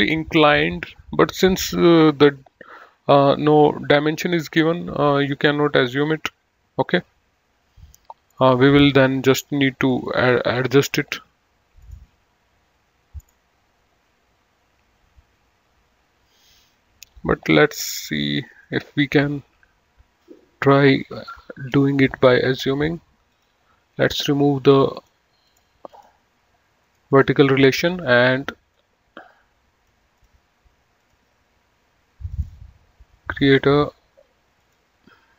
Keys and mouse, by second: 5.8 click, 18.2 click, 21.2 click, 22.8 Delete, 23.4 click, 25.2 click, 27.0 right click, 27.4 click, 29.0 click, 30.4 click, 32.4 click, 34.8 click.